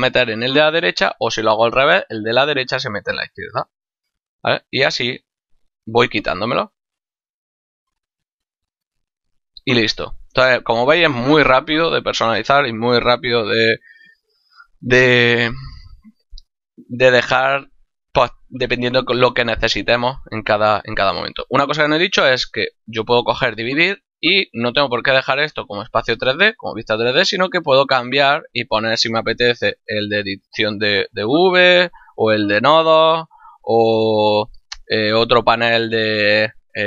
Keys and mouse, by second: 4.8 click, 7.3 click, 22.0 click, 26.9 click, 29.1 click, 30.3 click, 31.9 click, 36.4 click.